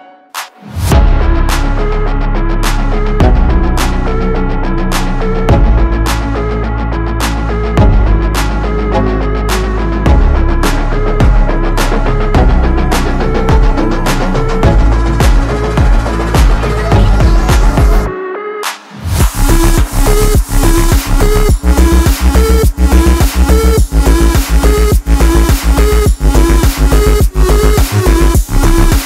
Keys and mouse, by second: 4.2 click, 6.2 v, 6.4 ctrl+space, 6.5 ctrl+click, 6.7 ctrl+space, 7.5 click, 9.3 click, 12.3 v, 12.4 ctrl+space, 12.4 ctrl+alt+click, 13.2 ctrl+alt+click, 13.9 v, 14.1 click, 14.9 i, 15.1 click, 15.2 v, 15.4 click, 16.7-20.3 alt+drag, 20.5 alt+click, 20.8-23.1 shift+drag, 23.8 space, 23.9 click, 24.1 space, 24.4 click, 25.0 shift+click, 25.3 alt+click, 26.2 shift+click, 27.2 space, 27.2 click, 27.4 space, 27.5 space, 27.5 space, 27.7-29.0 drag.